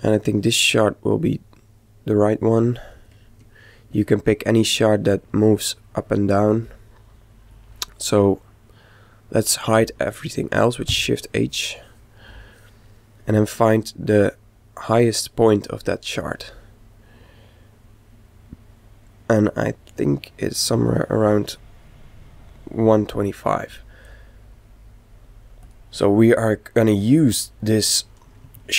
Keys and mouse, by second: 1.1-2.9 right drag, 10.4 shift+h, 13.4 click, 25.6 click, 27.8-28.7 middle drag.